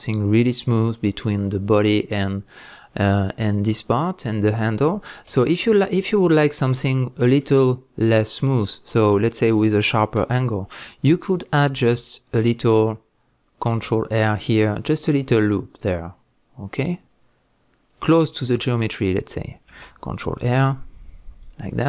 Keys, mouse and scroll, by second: 5.3 Tab, 7.0-7.4 scroll up 2, 17.9 click, 19.7 ctrl+r, 21.4 click, 21.7 scroll down 1.